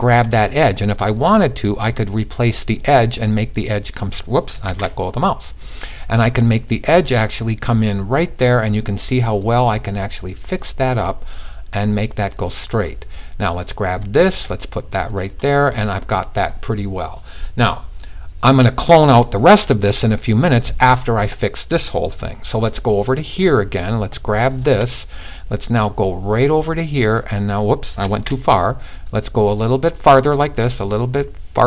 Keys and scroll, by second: 4.1 z, 27.6 super+z.